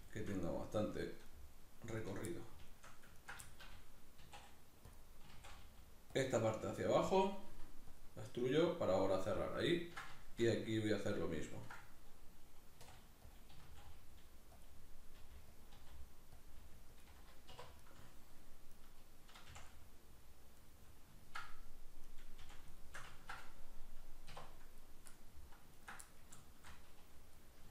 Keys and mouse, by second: 0.1-2.0 shift+middle drag, 2.0 right click, 2.3 middle click, 3.2 ctrl+right click, 3.4-5.0 shift+middle drag, 4.2 e, 5.0 click, 5.2 s, 6.2 click, 6.4 g, 7.0 click, 7.4 r, 8.0 click, 9.2-11.1 middle drag, 11.1 right click, 11.5 ctrl+right click, 12.8 e, 13.4 click, 13.5 s, 14.7 click, 15.2 g, 15.7 click, 15.7 r, 16.5 click, 16.6 g, 17.1 click, 17.5 2, 17.8 right click, 18.7 right click, 20.1-22.1 middle drag, 22.1 right click, 22.5 f, 22.8-24.8 shift+middle drag, 24.3 1, 24.8 right click, 25.1 middle click, 25.8 ctrl+right click, 26.1-27.7 middle drag.